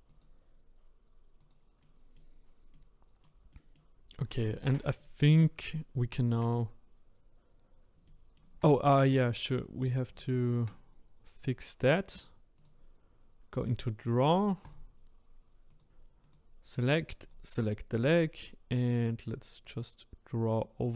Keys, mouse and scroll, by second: 0.1 click, 1.4 click, 1.8 middle click, 2.4-2.7 scroll down 1, 2.7-5.7 middle drag, 5.7-7.0 scroll down 2, 7.1-8.1 scroll down 3, 8.1-9.1 shift+middle drag, 9.1-9.6 scroll up 2, 10.2-12.6 shift+middle drag, 12.6-14.7 drag, 19.0-20.9 drag.